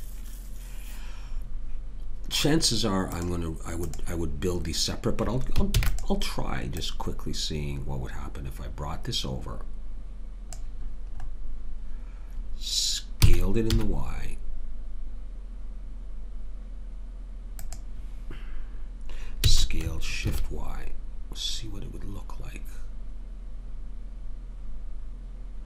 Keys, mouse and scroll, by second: 5.7 shift+d, 13.2 s, 19.5 s.